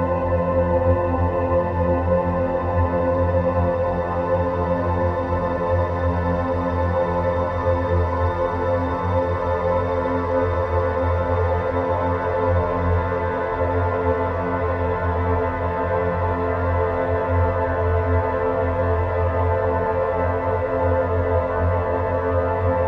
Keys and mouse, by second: 0.9-5.4 drag, 6.4-14.8 middle drag, 22.7-22.8 drag.